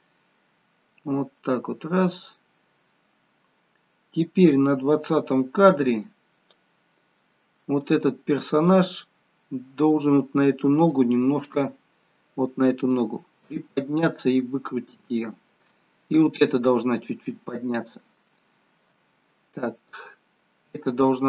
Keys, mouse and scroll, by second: 7.7-8.1 scroll up 3, 8.3-9.3 scroll down 1, 9.3-10.5 scroll down 3, 10.9 shift+middle click, 11.6-12.4 scroll up 2, 12.4-12.9 scroll up 3, 12.9 middle click, 13.6 scroll down 2, 14.7-15.1 scroll down 1, 15.1 shift+middle click, 18.3 shift+middle click, 19.0-19.9 scroll up 3, 19.9 middle click, 20.6-21.1 scroll down 1.